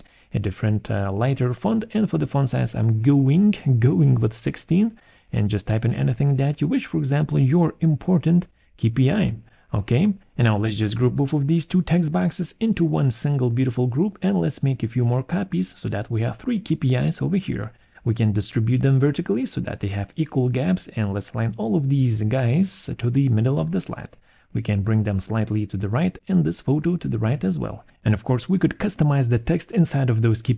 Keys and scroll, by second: 1.3 1, 1.4 6, 1.7 Return, 3.7 ctrl+a, 4.3-8.3 typing, 12.3 ctrl+g, 19.2 ctrl+g, 22.6 ctrl+z.